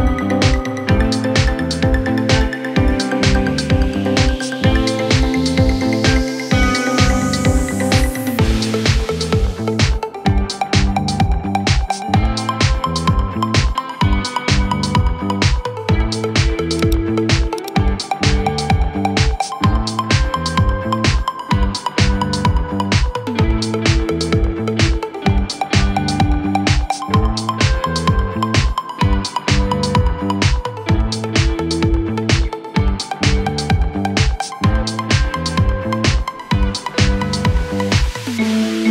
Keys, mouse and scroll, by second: 0.0 Left, 0.2 Left, 0.8 Up, 1.3 Right, 27.8 ctrl+t.